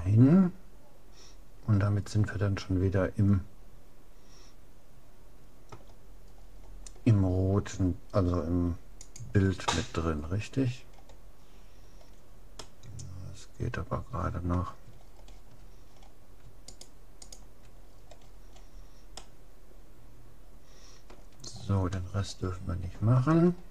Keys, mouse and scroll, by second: 6.3-8.5 middle drag, 9.1-10.7 drag, 10.2-14.2 middle drag, 15.1-15.9 scroll down 1, 15.9 middle click, 16.7-18.9 right drag, 18.9-20.9 middle drag, 21.5-22.1 scroll down 1, 22.1-23.7 middle drag.